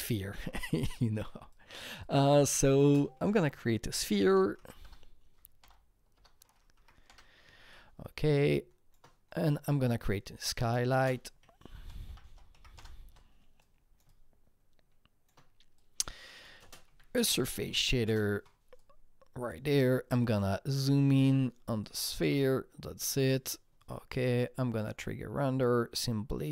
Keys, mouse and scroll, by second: 0.8 click, 0.9 double click, 1.5 click, 2.0 double click, 2.4 click, 2.7 click, 2.8 ctrl+space, 2.9-4.8 typing, 5.6 Return, 6.1 BackSpace, 6.7 Up, 7.1 Return, 7.1 BackSpace, 7.7-11.3 shift+drag, 8.0 Return, 10.9 ctrl+space, 11.1-12.6 typing, 12.7 Return, 13.6-16.3 drag, 16.5 shift+click, 16.6 ctrl+space, 16.6-18.3 typing, 18.8-20.1 drag, 21.7 click, 21.7 f, 21.8-26.5 alt+drag.